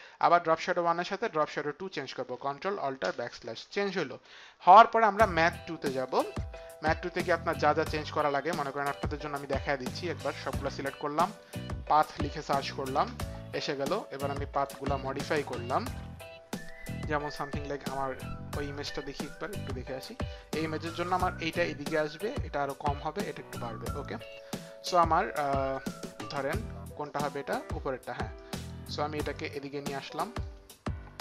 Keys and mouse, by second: 1.4 click, 3.2 click, 5.9 click, 6.1 click, 15.8-16.6 typing, 17.7 click, 21.9 click, 24.2 click, 27.1 click, 28.4 click, 29.4 click.